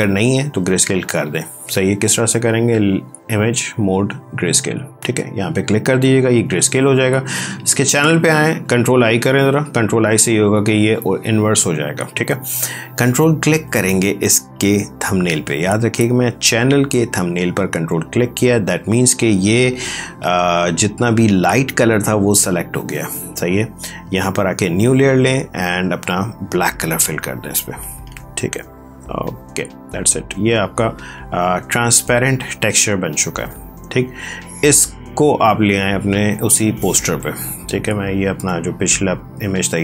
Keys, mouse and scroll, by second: 2.5 click, 7.2 click, 8.9 ctrl+i, 13.9 ctrl+click, 22.5 click, 25.5 d, 26.7 alt+BackSpace, 28.6 click, 30.3 ctrl+d, 34.0 click, 38.3 click.